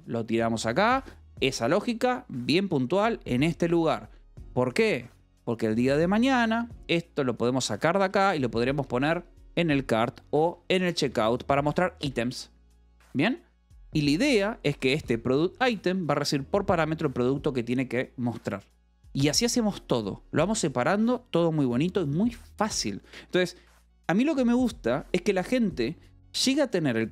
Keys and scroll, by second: 0.1 shift+v, 0.6 Escape, 1.1 v, 1.7 e, 3.6 Escape, 7.3 shift+v, 7.9 Escape, 8.1 j, 9.4 a, 9.8 Escape, 10.1 j, 11.2 Escape, 12.6 k, 13.7-14.9 typing, 15.5 Escape.